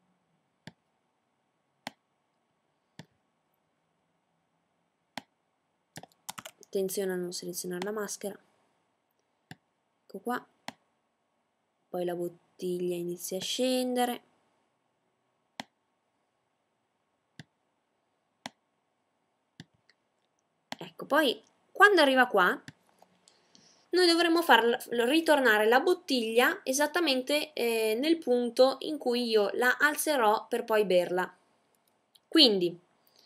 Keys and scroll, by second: 5.7 z.